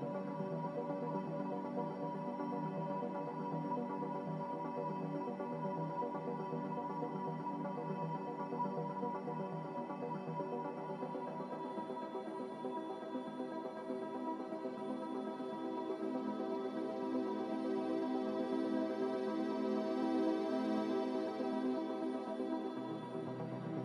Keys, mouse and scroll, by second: 3.2 a, 4.2 click, 6.6 click, 8.6 5, 9.4 2, 12.2 2, 12.5 2.